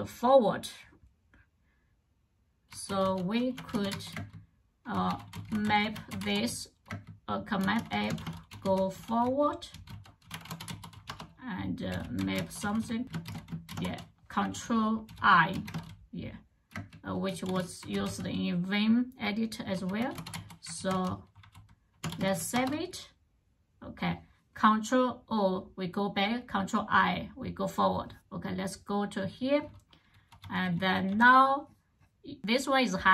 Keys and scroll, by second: 2.3-15.5 typing, 16.5-22.6 typing, 29.7-31.4 typing.